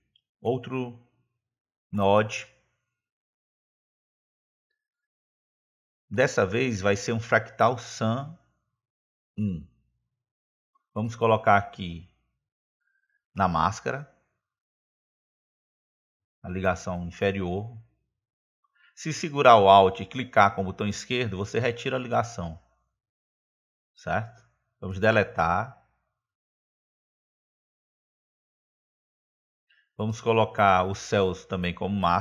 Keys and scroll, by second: 2.7 space, 26.8 Delete.